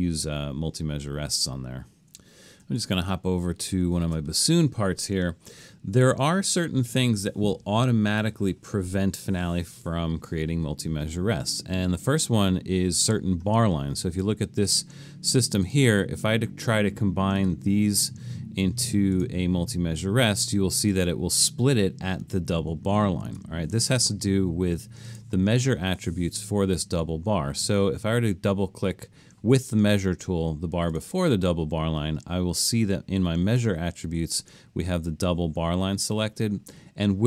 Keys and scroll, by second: 2.8 alt+super+., 3.8 alt+super+., 23.3 super+z.